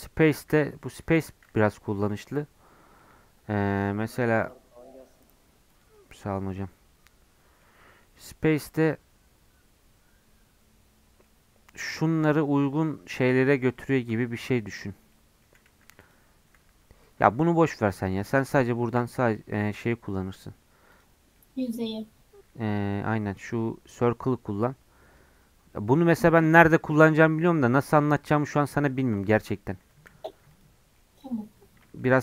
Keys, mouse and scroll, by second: 0.3 ctrl+z, 0.6 middle click, 1.1 3, 1.9-2.9 alt+drag, 2.9-4.4 middle drag, 4.4-6.2 right drag, 6.2-13.3 middle drag, 13.3 Tab, 13.7 middle click, 14.5 Tab, 15.1 middle click, 15.7 1, 16.0 click, 16.6 Tab, 17.0 middle click, 17.5 scroll down 1, 17.7 middle click, 18.1 Tab, 19.0 a, 19.5 3, 19.7-21.3 right drag, 21.3 middle click, 21.7-22.3 scroll up 3, 22.3 Tab, 22.6 Tab, 22.8-29.5 right drag, 29.8 Tab, 30.0 x, 30.8 scroll down 2, 30.9 middle click, 31.3 scroll down 1, 31.6 scroll up 1, 31.8 middle click.